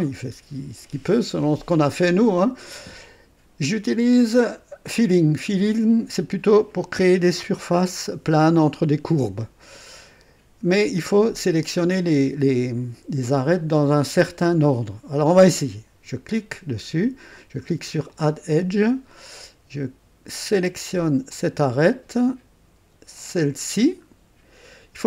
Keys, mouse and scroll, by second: 15.3 click, 18.0 click, 21.3 click, 23.1 click, 24.1 scroll up 2.